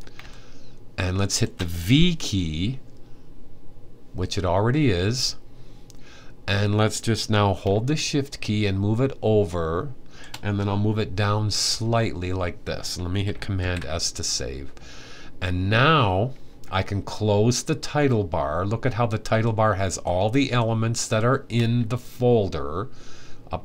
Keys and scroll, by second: 11.3 Down, 13.2 super+s.